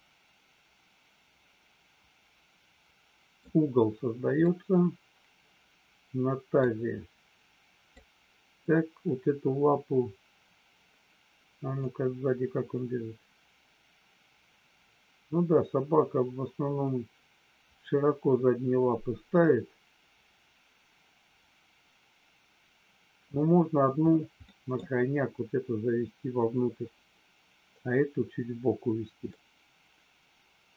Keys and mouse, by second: 4.4-6.5 middle drag, 7.9 middle click, 11.9 click, 24.5 middle click, 29.3-30.7 middle drag.